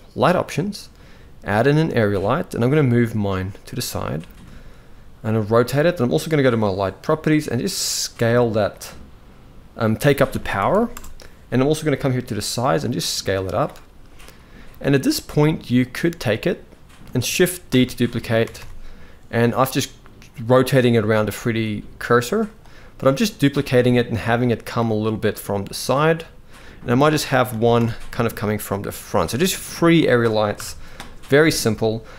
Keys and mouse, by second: 2.4 g, 4.0 r, 7.3-8.3 drag, 9.4-10.6 drag, 10.4 0, 12.1-13.3 drag, 14.8-15.6 drag, 17.4 shift+d, 21.1 g, 24.0 middle click, 24.9-25.4 middle drag, 26.2 middle click, 27.2 shift+d, 28.9 g, 30.2 KP_0.